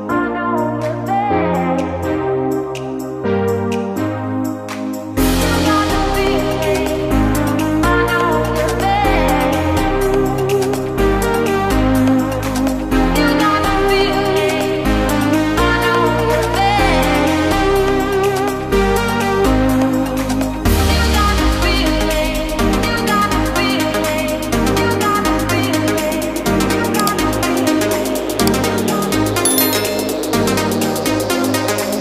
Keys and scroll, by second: 5.7 ctrl+space.